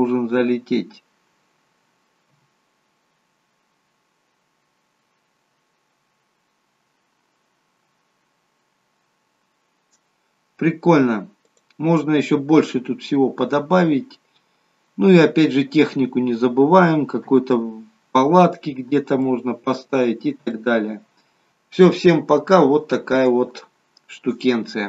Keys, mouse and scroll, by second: 0.1 scroll down 2, 2.5 KP_0, 11.7 click, 12.8-13.2 scroll down 3, 17.4 KP_0, 18.8 scroll down 5, 19.3 middle click, 20.3 scroll down 2, 20.6 middle click.